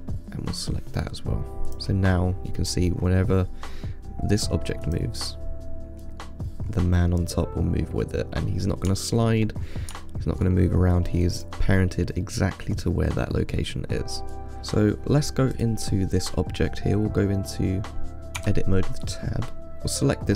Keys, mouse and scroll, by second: 2.0-2.4 drag, 2.4 scroll up 3, 3.0 scroll up 5, 3.3-3.6 scroll down 5, 3.6-5.1 middle drag, 5.1-6.9 drag, 6.9-7.4 scroll up 4, 7.4-8.5 middle drag, 8.5 scroll down 2, 9.2-9.9 shift+middle drag, 9.9-10.3 scroll up 5, 10.3-11.6 shift+middle drag, 11.6-12.5 drag, 12.5 scroll up 1, 12.5-14.6 middle drag, 15.8 click, 18.6 Tab, 19.5 scroll up 3, 19.7 click.